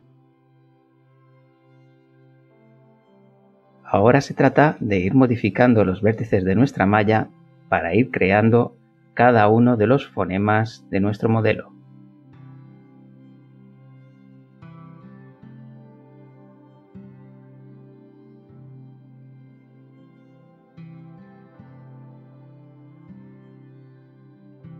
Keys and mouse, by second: 2.7 click, 3.4 click, 4.0 shift+click, 4.9 g, 5.7 middle click, 7.6 click, 8.4 click, 9.7 g, 10.5 middle click, 11.3 middle click, 14.8 click, 15.2 middle click, 16.2 click, 17.1 g, 18.8 click, 19.5 click, 19.9 shift+click, 20.7 g, 22.3 click, 23.3 click, 23.8 shift+click, 24.5 g.